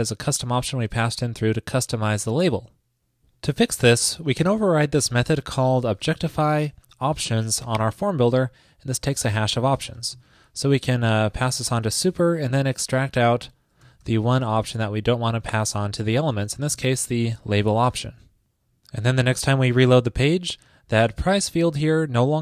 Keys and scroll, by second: 17.3 super+s.